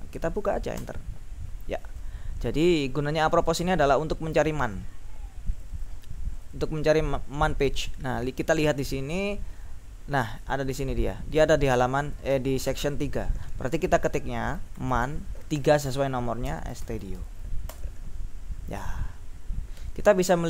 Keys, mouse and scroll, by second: 0.8 Return, 4.4-5.0 scroll up 2, 5.7 click, 6.5 click, 7.9 click, 8.7-9.6 scroll down 2, 10.5 click, 11.9 click, 14.5-17.8 typing.